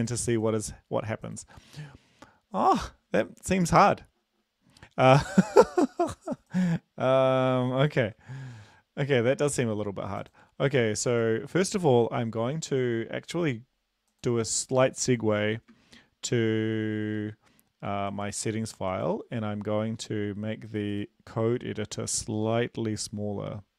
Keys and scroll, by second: 7.9 ctrl+`, 15.8 ctrl+b, 17.1 ctrl+b.